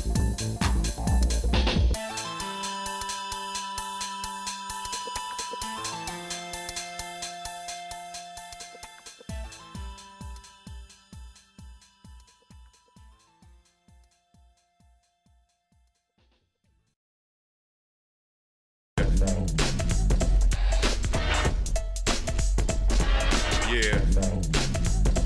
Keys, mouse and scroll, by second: 22.6 click, 24.4 scroll down 2.